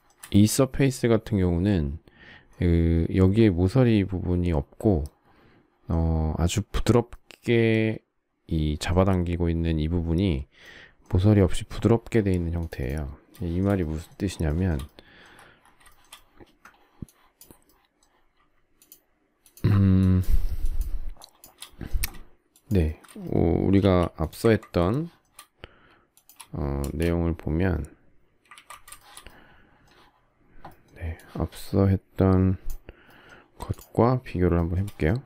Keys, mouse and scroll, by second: 13.3 shift+middle click, 14.3 shift+scroll, 14.4 shift+middle click, 15.9 shift+middle click, 18.8 shift+click, 19.4 shift+click, 20.0 shift+click, 20.6 shift+click, 21.2 shift+click, 22.5 shift+click, 22.6 shift+click, 22.8 shift+middle click, 23.0 shift+double middle click, 23.8 m, 24.9 shift+middle click, 26.8 space, 28.5 ctrl+z, 29.0 shift+middle click, 33.7 shift+click, 34.5 shift+middle click.